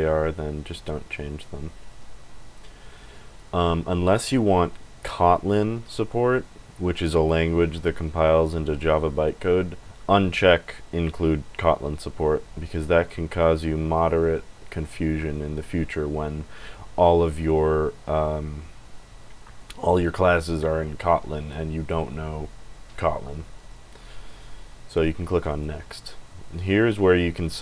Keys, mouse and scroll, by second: 25.4 click.